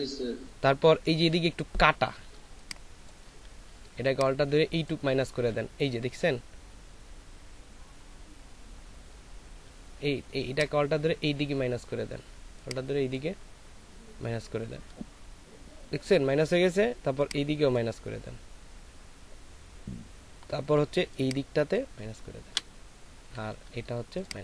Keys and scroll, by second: 2.4 ctrl+space, 3.6 ctrl+alt+space.